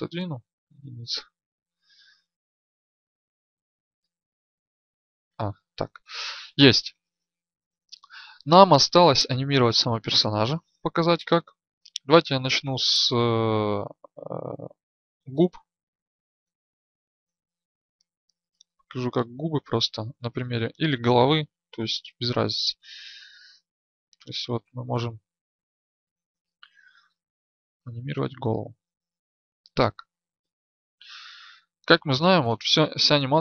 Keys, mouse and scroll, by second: 0.2 KP_1, 5.2 ctrl+alt+a, 23.4 right click, 28.0-31.4 drag, 32.5-33.4 drag.